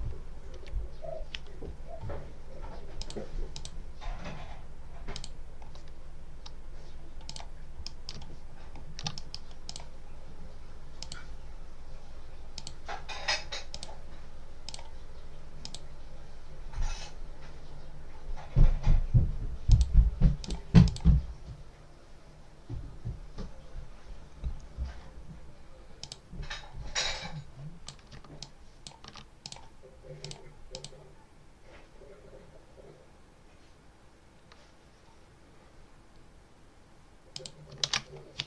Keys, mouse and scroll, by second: 0.4 Right, 2.9 click, 3.4 click, 5.0 click, 7.2 click, 7.7 middle click, 8.1-8.6 ctrl+scroll down 1, 9.0 ctrl+middle click, 9.6 ctrl+click, 10.0 ctrl+scroll up 1, 10.2 click, 12.4 click, 13.6 click, 14.6 click, 15.5 click, 19.6 click, 20.3 click, 20.7 click, 25.9 click, 26.8 click, 28.3-28.9 ctrl+alt+drag, 29.3 ctrl+alt+click, 30.1 click, 30.6 click, 37.2 click, 37.7 ctrl+s.